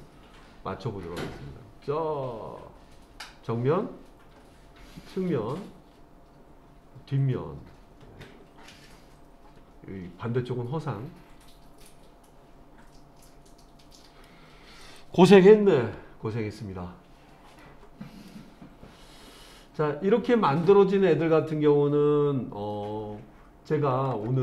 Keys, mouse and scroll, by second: 0.4-1.1 scroll down 2, 1.1-14.3 middle drag, 14.8 click, 15.8 Tab, 16.7-17.6 scroll down 1, 17.6-18.3 middle drag.